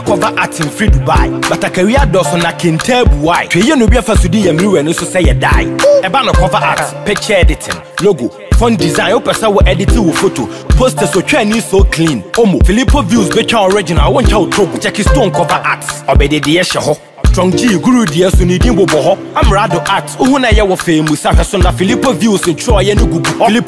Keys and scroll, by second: 9.4 ctrl+-, 23.3 ctrl+z.